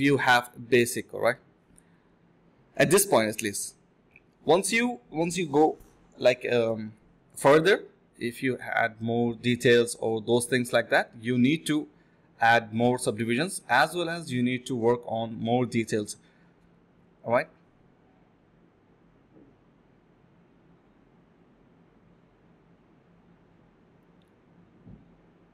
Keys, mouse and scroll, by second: 0.2 1, 0.4 double click, 3.3 alt+click, 4.3-4.6 typing, 5.8-6.1 typing, 7.2 alt+click, 7.4 alt+click, 7.7 alt+click, 9.1 alt+click, 13.1-14.1 typing, 16.1-16.6 typing, 18.0-18.5 typing, 19.2 alt+click, 20.5 shift+click, 20.6 shift+double click, 20.7 shift+click, 21.6-22.9 typing, 25.0 alt+click.